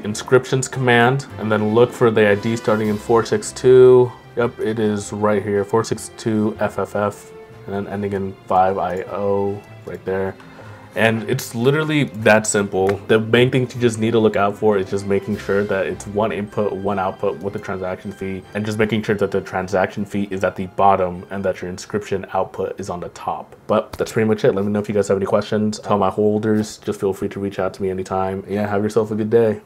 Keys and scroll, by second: 9.8 ctrl+m.